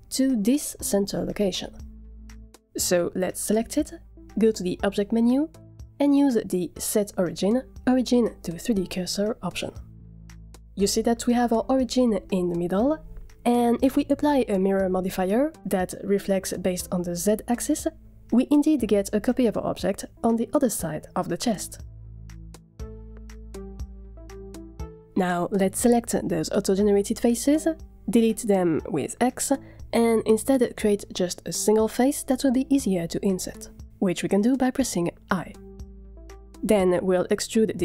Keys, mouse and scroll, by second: 4.8-10.0 drag, 13.4-15.3 drag, 16.1 click, 16.4 click, 23.0-23.4 scroll down 1, 23.4 middle drag, 23.8 drag, 24.1 Tab, 24.2 middle click, 24.6 drag, 25.1 h, 25.2 click, 25.3 h, 25.4 click, 25.5 Tab, 25.7 click, 25.9 scroll up 3, 26.0 shift+middle click, 26.3 scroll down 1, 26.4 shift+middle click, 27.2 click, 27.9 shift+click, 28.6 x, 29.2 shift+middle click, 30.1 alt+click, 31.0 f, 33.0 middle click, 33.0 scroll up 1, 33.0-33.6 scroll down 4, 33.6 shift+middle click, 34.0 scroll down 1, 34.1 middle click, 34.8 i.